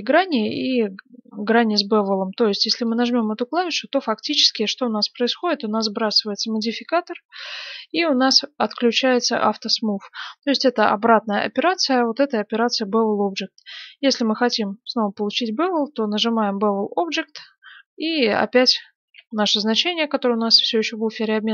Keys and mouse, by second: 2.8-5.1 drag, 3.3-7.9 middle drag, 7.9-19.0 drag, 19.0 ctrl+v.